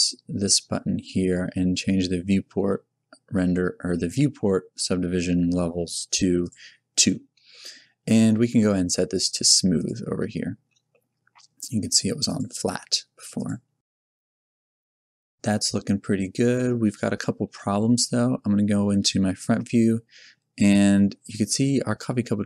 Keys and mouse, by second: 6.4-9.7 middle drag, 9.7-14.8 drag, 17.4 KP_1.